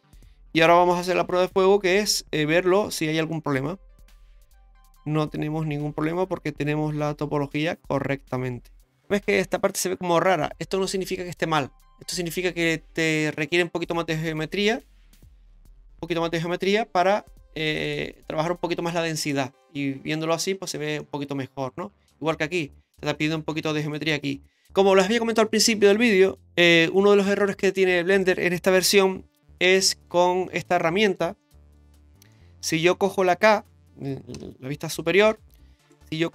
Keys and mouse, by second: 0.9 shift+middle click, 2.7 Tab, 3.3-9.1 middle drag, 15.8 ctrl+r, 19.2 right click, 19.6 middle click, 21.0-22.1 middle drag, 23.5 ctrl+r, 29.8 middle click, 30.1 Tab, 30.8 shift+middle click, 31.4 middle click, 32.3 shift+middle click, 34.3 KP_7, 35.3 shift+middle click.